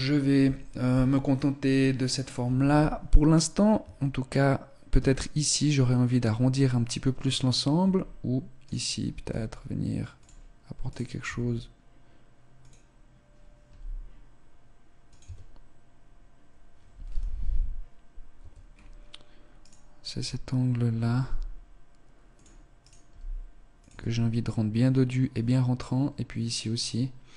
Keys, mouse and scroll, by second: 3.7 Tab, 4.8 Tab, 7.7 Tab, 8.5 right click, 9.1 s, 10.1 click, 10.5 right click, 11.1 s, 13.5 g, 15.1 Tab, 16.9 z, 18.3 Tab, 18.5 scroll up 3, 19.1 right click, 21.1 g, 22.7 right click, 22.9 g, 23.9 Tab.